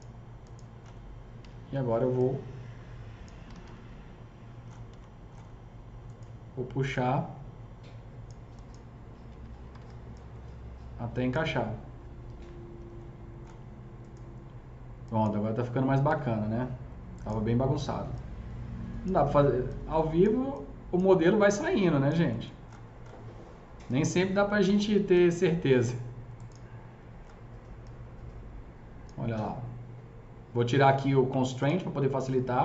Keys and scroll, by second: 1.4 s, 3.1-4.0 typing, 4.7 F3, 9.3 F3, 9.5 F3, 9.7 F4, 16.0 s, 24.6 s.